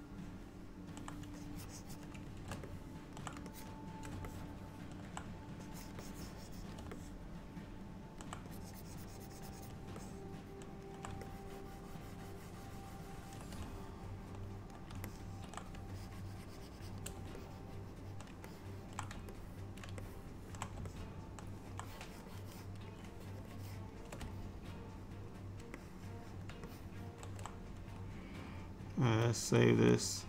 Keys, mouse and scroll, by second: 1.4 click, 2.8 middle click, 3.6 shift+click, 4.4 middle click, 5.7 click, 6.1 click, 7.0 middle click, 8.6 click, 10.0 middle click, 11.3 ctrl+click, 13.7 middle click, 15.1 ctrl+middle click, 16.0 shift+click, 16.5 shift+click, 17.4 middle click, 18.5 ctrl+middle click, 19.4 middle click, 20.1 shift+middle click, 20.9 middle click, 21.9 click, 22.4 click, 23.4 shift+click, 23.6 shift+click, 23.6 click, 24.4 middle click, 25.8 middle click, 26.7 shift+middle click, 27.0 shift+middle click, 29.1 ctrl+s.